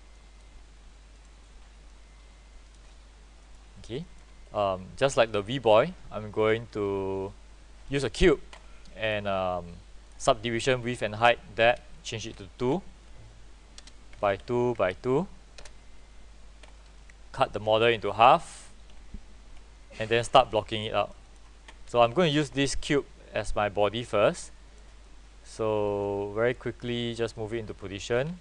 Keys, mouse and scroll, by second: 3.5 middle click, 4.1 alt+middle click, 5.4-7.2 right drag, 9.1 click, 12.8 KP_2, 13.9 BackSpace, 14.3 Tab, 14.5 KP_2, 14.9 Tab, 15.7 Return, 17.1 right click, 18.1-19.3 drag, 19.0 Delete, 20.7 right click, 21.4-22.4 drag, 21.9 w, 22.9-25.1 drag, 25.1 right click, 26.1-27.4 drag.